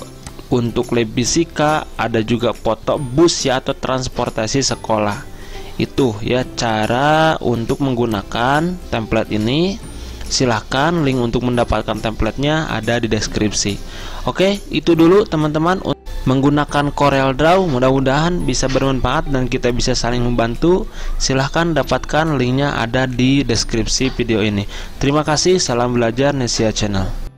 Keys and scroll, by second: 16.0 F8, 16.0 alt+Tab.